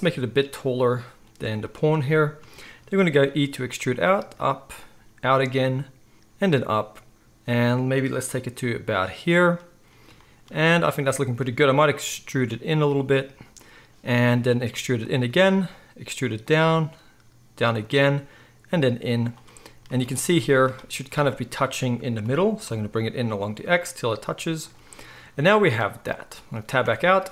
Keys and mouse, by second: 1.9-27.3 middle drag, 3.3 e, 4.1 e, 4.9 e, 6.3 e, 12.0 e, 14.2 e, 15.6 e, 16.5 e, 18.0 e, 19.9 z, 22.2 g, 26.8 Tab.